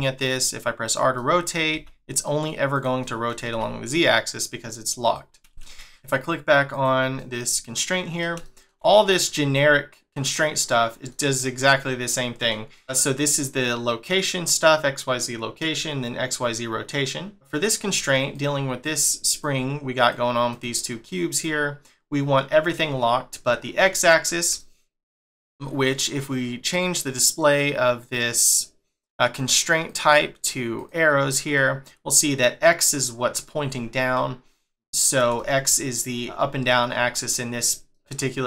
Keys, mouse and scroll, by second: 1.2 middle click, 1.7 r, 3.0 middle click, 3.5 r, 5.6 middle click, 6.7 click, 7.2 middle click, 12.2 middle click, 12.7 middle click, 17.3 shift+middle click, 18.3 click, 18.8 click, 19.3 click, 20.0 click, 20.5 click, 21.3 click, 23.8 middle click, 28.1 middle click, 29.8 click, 31.5 middle click, 34.1 middle click, 37.9 middle click.